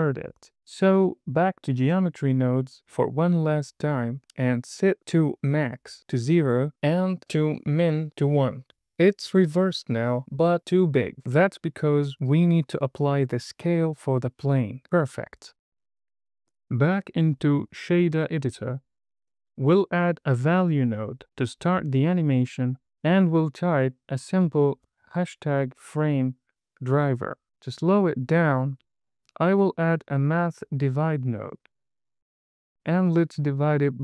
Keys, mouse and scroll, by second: 0.8-2.3 drag, 2.9 middle click, 4.1-5.9 drag, 7.8-9.2 drag, 9.8 click, 11.6 super+a, 13.9 KP_0, 14.7-15.8 scroll up 5, 17.0-19.2 drag, 19.8 click, 20.9 middle click, 21.6 shift+a, 24.0 drag, 24.3-26.7 drag, 28.2 drag, 30.5 Down, 32.3 click, 33.4-34.0 drag.